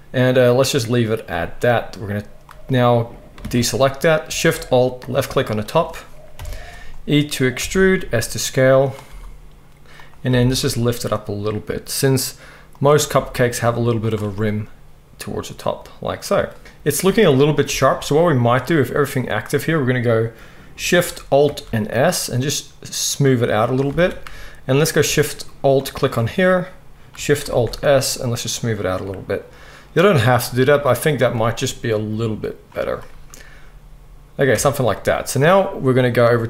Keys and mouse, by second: 3.4 alt+a, 5.0 alt+shift+click, 6.3 KP_1, 7.6 e, 9.0 s, 10.3 g, 13.0 s, 14.3-18.4 middle drag, 16.6 Tab, 17.7 Tab, 21.4 alt+shift+s, 23.9 alt+a, 25.7 alt+shift+click, 27.5 alt+shift+s, 27.7-36.4 middle drag, 34.5 Tab.